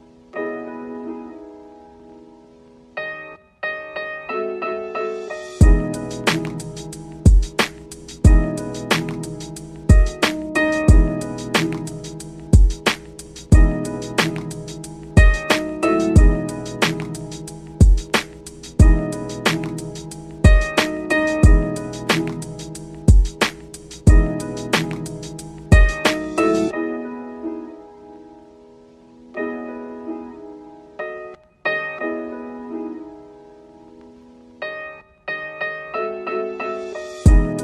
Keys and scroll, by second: 1.1 ctrl+k.